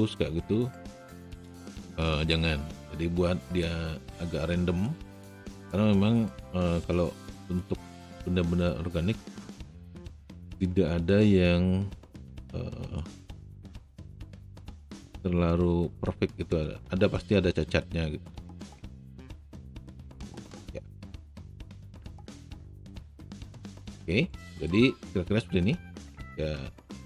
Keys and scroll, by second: 10.1 e, 13.5 w.